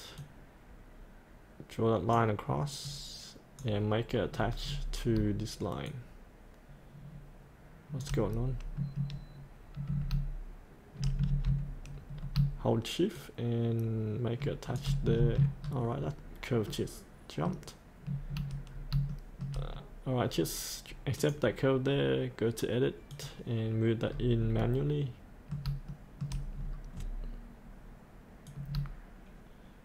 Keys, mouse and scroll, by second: 4.3-5.2 scroll down 1, 5.9-8.0 shift+drag, 8.3-9.9 scroll up 1, 9.9 scroll down 1, 12.1 scroll down 1, 15.6-16.7 scroll up 1, 16.7 middle click, 18.1 scroll down 1, 18.7 scroll up 1, 19.1 shift+middle click, 19.7-21.1 scroll down 1, 21.1 click, 24.1-24.4 scroll up 1, 24.6 middle click, 25.9 shift+middle click, 26.6-28.5 scroll down 1, 28.5-29.8 drag.